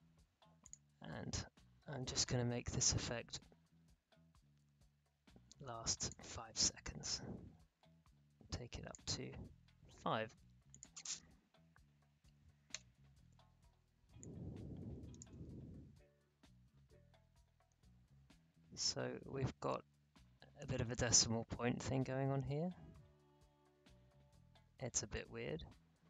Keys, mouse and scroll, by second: 0.7 click, 3.3-10.7 drag, 12.2 5, 12.7 Return, 14.2 click, 15.3 space, 25.1 space.